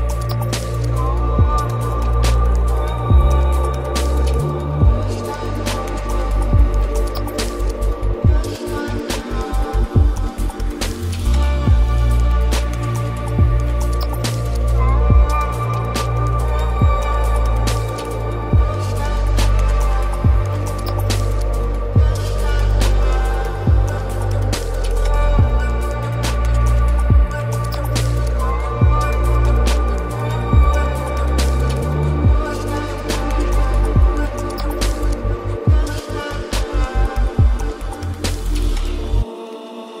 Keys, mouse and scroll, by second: 7.5-8.4 middle drag, 8.4 click, 9.2-10.5 middle drag, 10.5 click, 12.9-14.3 drag, 15.4-18.4 drag, 19.3-20.5 middle drag, 20.5 click, 23.2 click, 23.9-27.0 drag, 27.7-29.0 middle drag, 29.0 click, 30.8 click, 31.5-34.6 drag, 36.1-40.0 middle drag.